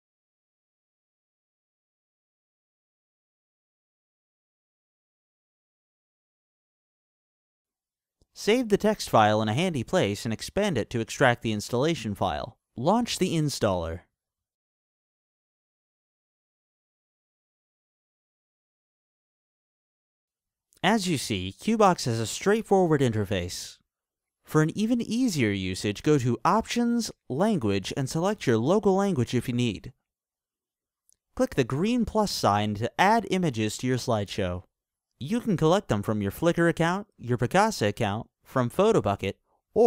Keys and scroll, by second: 0.0-4.7 typing.